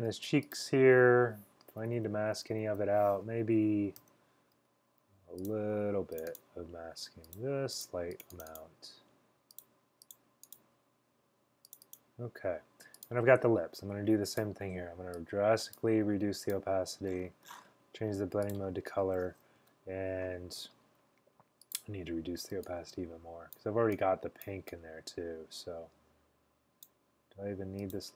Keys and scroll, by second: 1.6-2.8 typing, 4.1 x, 4.7 x.